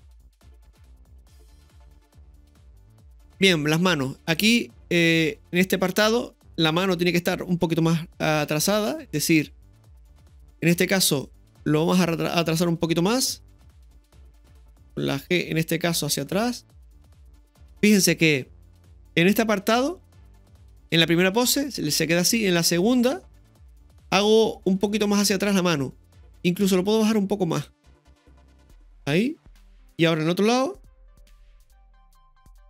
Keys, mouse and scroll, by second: 2.8 shift+middle click, 3.4-4.4 drag, 7.4-8.3 scroll up 2, 8.3 scroll up 1, 8.7 ctrl+KP_3, 10.2-10.6 shift+middle drag, 11.2 right click, 13.5 r, 16.2 g, 20.7-25.7 drag, 20.7 scroll up 2, 26.3-27.7 drag, 28.9 click, 28.9 i, 30.8 KP_3.